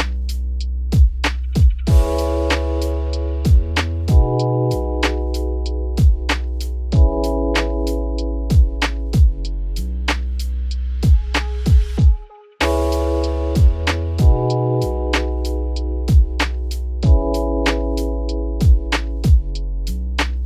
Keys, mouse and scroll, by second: 0.3-2.5 drag, 2.5 z, 3.4-5.4 middle drag, 5.4 click, 5.7-6.1 middle drag, 6.1 click, 6.3-7.4 middle drag, 7.4 click, 9.5 click, 11.6-12.7 scroll down 10, 12.1-12.5 middle drag, 12.7-13.2 shift+middle drag, 13.2-14.2 scroll down 5, 14.2 `, 14.8-15.5 scroll down 10, 15.5 shift+middle click, 16.1-16.5 scroll up 4, 16.5-17.0 shift+middle drag, 17.0 click, 17.2 scroll up 3, 18.3-19.0 shift+middle drag, 19.0 shift+click, 19.7 shift+click.